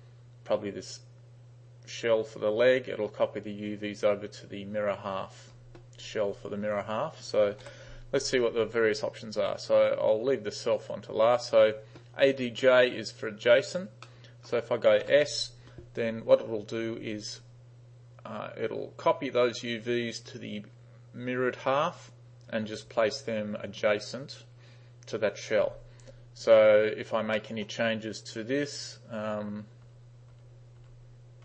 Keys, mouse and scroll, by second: 7.7 u, 11.5 click, 14.1 middle click, 16.1 s, 27.4 middle click, 29.4-31.4 typing.